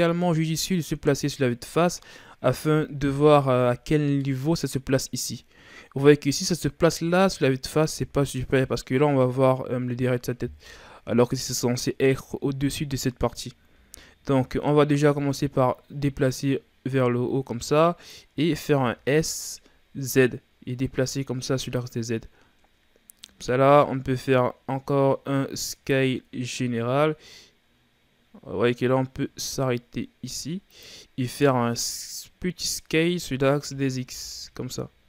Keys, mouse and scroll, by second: 0.4 z, 1.3-2.1 scroll down 2, 2.1-3.2 middle drag, 3.2 KP_1, 4.0 z, 6.4-6.9 scroll down 4, 6.9 scroll up 1, 7.8 z, 8.5-9.0 scroll down 2, 9.0-10.6 middle drag, 10.6 KP_1, 11.8-13.5 scroll up 2, 13.7 z, 15.2-18.2 drag, 18.6 s, 24.7 s, 33.6 s.